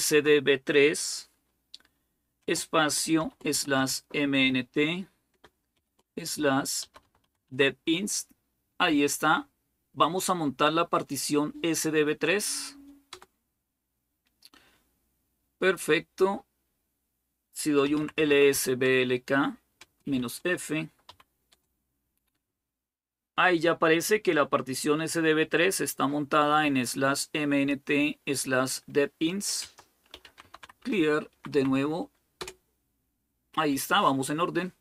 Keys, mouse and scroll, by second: 0.0-0.8 typing, 2.2-4.2 typing, 5.6 typing, 6.6-7.0 typing, 7.3 Tab, 12.9 Return, 17.5-21.3 typing, 26.1-28.1 drag, 29.4-31.0 typing, 31.1 Up, 31.3 Up, 32.2 Return.